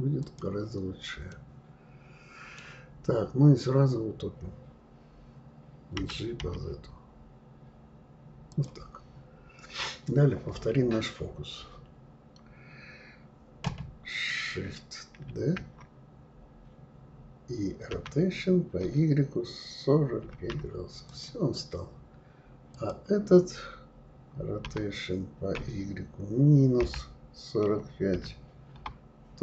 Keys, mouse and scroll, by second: 1.3-2.8 middle drag, 2.8-5.9 scroll up 2, 5.9 g, 9.1-9.5 scroll down 2, 15.3 shift+d, 22.7 click, 24.6 r.